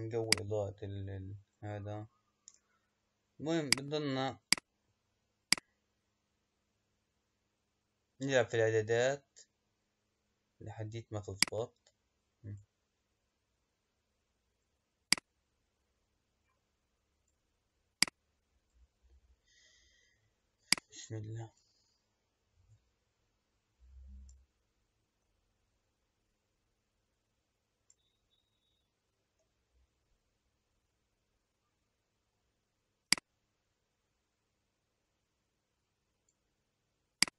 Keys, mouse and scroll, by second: 0.2-3.3 drag, 3.7 click, 4.4 click, 5.5 click, 8.6 middle click, 8.6-9.6 scroll down 6, 9.7-10.0 scroll up 3, 11.4 click, 15.0-20.6 drag, 23.2-24.4 scroll down 8, 24.4-25.5 middle drag, 25.5-26.3 scroll down 3, 26.5-27.2 scroll up 2, 28.0-29.7 middle drag, 29.7-31.5 scroll down 2, 31.5-32.2 scroll up 1, 33.1 click, 37.2 click.